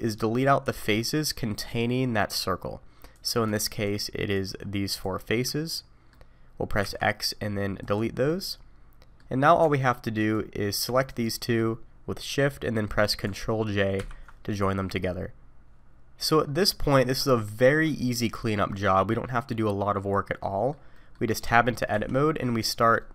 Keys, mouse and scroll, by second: 0.1-0.6 scroll up 1, 0.6 3, 3.1 click, 3.8 shift+click, 4.3 shift+click, 4.9 shift+click, 5.6 middle click, 6.8 x, 8.3 middle click, 9.6 Tab, 10.2 click, 11.0 shift+click, 14.0 ctrl+j, 15.7 middle click, 20.4 middle click, 20.9 middle click, 21.4 Tab, 21.9 1, 22.6 click, 23.0 middle click.